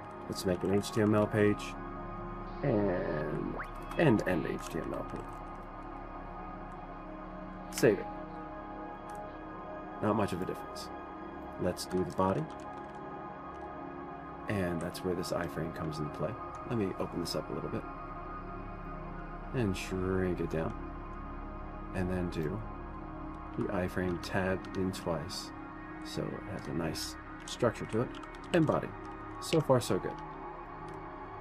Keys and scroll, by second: 0.6-7.7 typing, 3.0-3.9 Down, 4.2 Down, 4.2 Return, 4.4 Return, 8.3 ctrl+s, 9.2-10.0 typing.